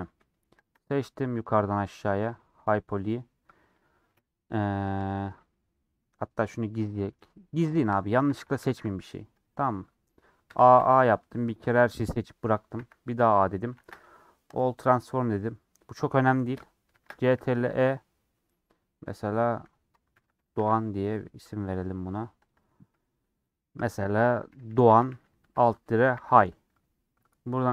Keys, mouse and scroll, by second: 0.6 shift+click, 2.3 g, 7.1 click, 15.0-17.0 middle drag, 17.0 ctrl+shift+e.